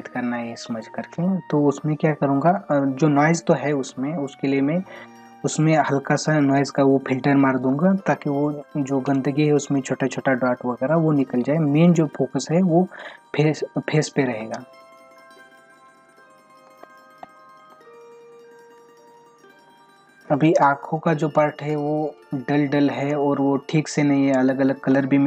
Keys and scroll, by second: 14.8 ctrl+-, 16.1 ], 16.7 space, 18.1 ctrl+-, 23.1 space.